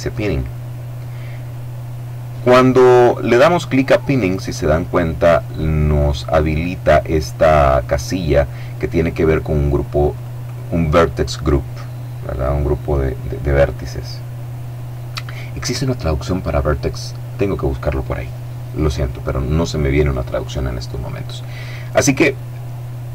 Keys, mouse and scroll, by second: 3.4 click, 4.1 click, 9.8 click, 11.0 click, 12.0 click.